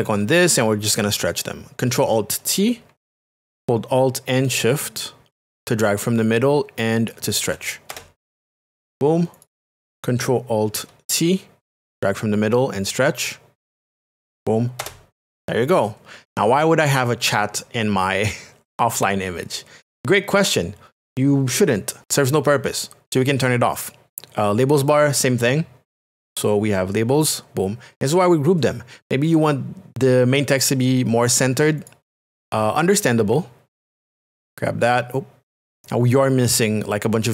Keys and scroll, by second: 7.9 Return, 11.8 alt+t, 14.8 shift+Return.